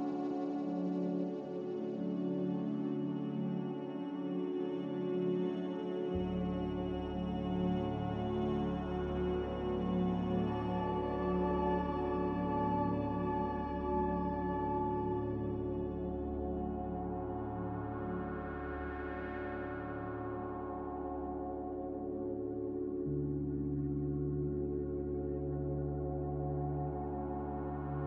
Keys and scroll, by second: 6.3 Delete, 27.0 g.